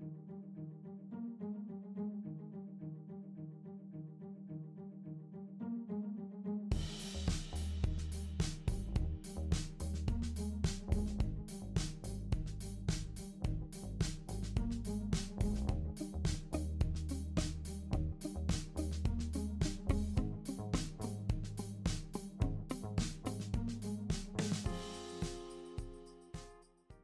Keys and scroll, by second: 7.1-10.3 typing.